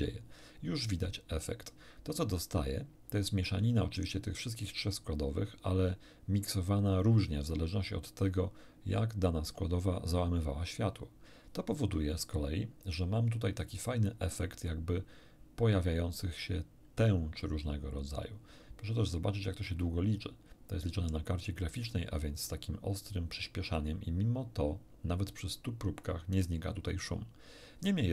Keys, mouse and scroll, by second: 17.3 scroll up 1, 17.9 middle click, 18.9 middle click, 19.5 middle click, 20.6 middle click.